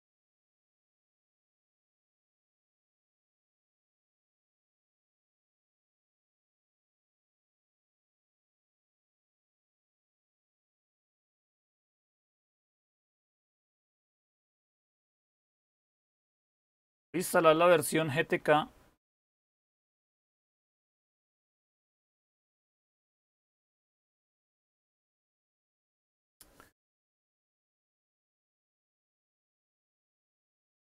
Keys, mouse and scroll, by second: 4.6-11.6 typing, 10.0 Tab, 12.6 Tab, 13.1-13.8 typing, 16.9 typing, 19.7-20.4 typing, 24.8-25.5 typing, 27.2-27.9 typing.